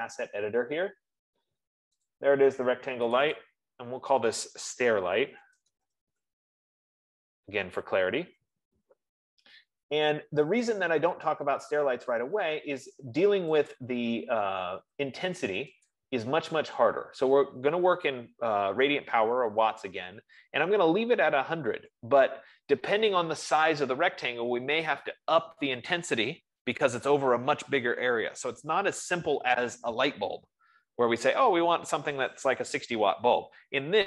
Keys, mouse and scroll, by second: 2.5 click, 3.5 F15, 3.7 click, 3.9 click, 5.2 ctrl+a, 5.4-8.0 typing, 8.8 Return, 14.5 click, 16.4 click.